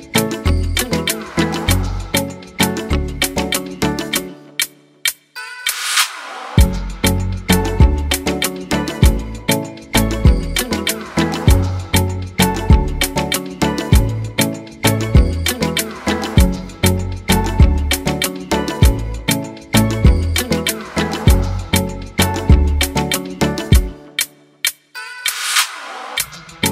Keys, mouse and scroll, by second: 0.3 ctrl+z.